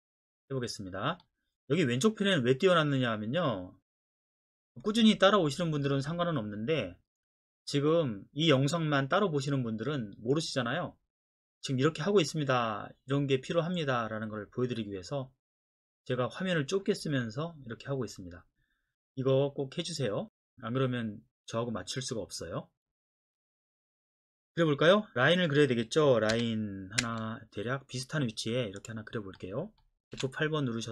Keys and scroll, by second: 26.3 l, 27.0 space, 30.1 F8.